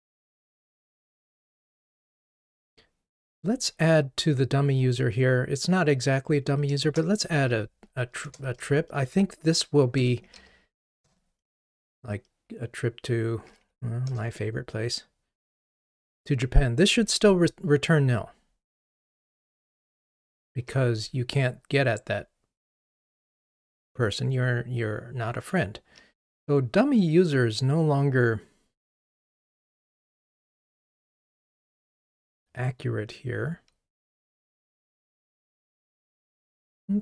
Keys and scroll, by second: 8.3 Return, 18.8 ctrl+r.